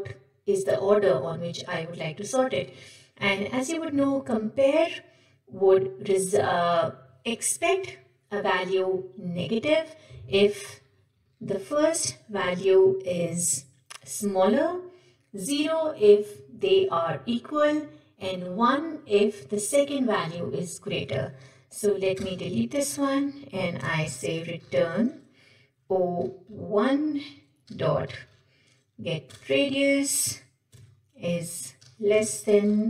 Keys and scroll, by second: 29.3 Return.